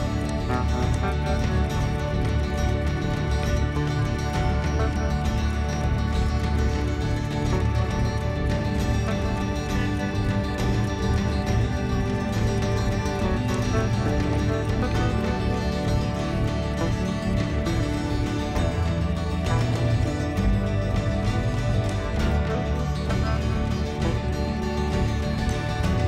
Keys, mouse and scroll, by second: 0.3 click, 1.0 click, 1.5-13.7 middle drag, 13.7-14.6 drag, 14.6-17.4 middle drag, 17.4-17.9 scroll up 3, 17.9-22.0 middle drag, 22.0 click, 22.2-25.7 middle drag, 25.7 click.